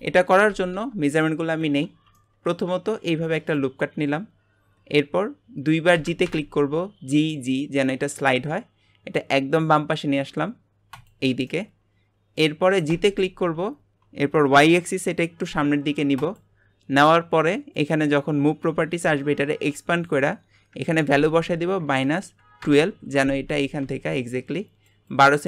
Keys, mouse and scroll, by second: 0.7 Tab, 1.2 middle click, 1.9 alt+a, 2.1 middle click, 3.0 ctrl+r, 4.2-5.9 scroll up 2, 5.9 g, 11.5-12.9 middle drag, 12.9 g, 17.7-23.2 drag.